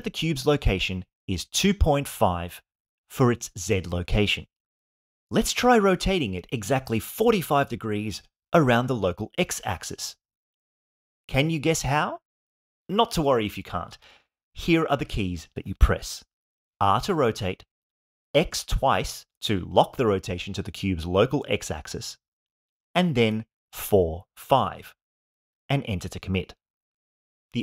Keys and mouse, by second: 16.6 r, 18.4 x, 18.8 x, 22.8 4, 23.4 5, 25.5 click.